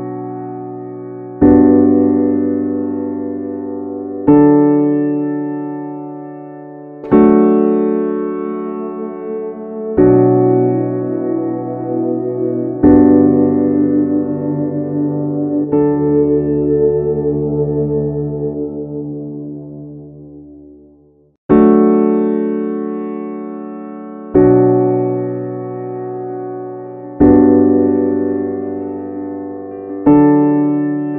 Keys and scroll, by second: 2.2 ctrl+a, 3.2 ctrl+x, 5.3 ctrl+v, 11.2 ctrl+v.